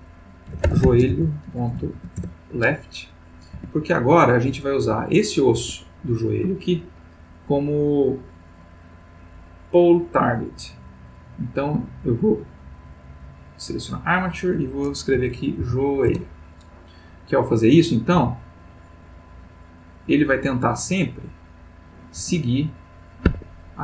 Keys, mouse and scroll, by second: 0.5-1.8 typing, 2.2 shift+Return, 3.6 Tab, 4.8 g, 5.6 Escape, 11.4 click, 13.2 click, 14.1 click, 15.1 j, 15.6 o, 16.1 Return, 17.5 click, 18.1 g, 20.6 click, 21.4 click, 22.2 g, 23.3 Escape.